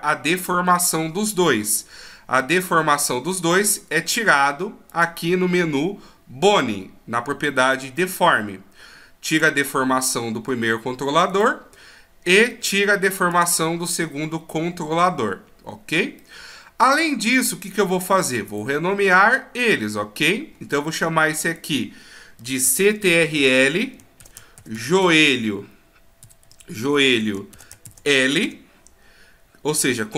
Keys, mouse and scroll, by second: 4.9 click, 6.7-7.5 scroll down 1, 9.3 click, 11.3 right click, 13.3 click, 16.2 middle click, 18.5 right click, 19.6 right click, 20.5-21.6 scroll up 7, 21.6 click.